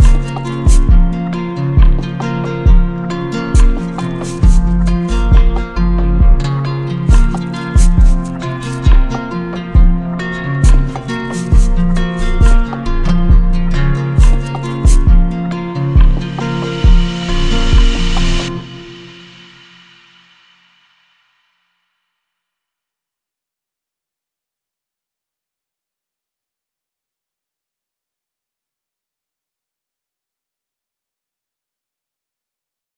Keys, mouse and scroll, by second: 0.2 click, 0.9 click, 1.6 click, 2.0 click, 2.6 click, 3.2 click, 3.8 click, 4.2 click, 4.8 click, 5.3 click, 5.8 click, 6.2 click, 6.6 click, 9.7 shift+click, 10.3 click, 11.0 click, 12.1 click, 12.8 alt+click, 15.8 click, 17.0 shift+click, 17.9 alt+click, 19.1 right click, 19.9 z, 21.2-22.5 drag, 22.5 right click, 24.5-25.5 drag, 26.0 right click, 27.8 click, 27.9 click, 28.9 click, 31.3 click.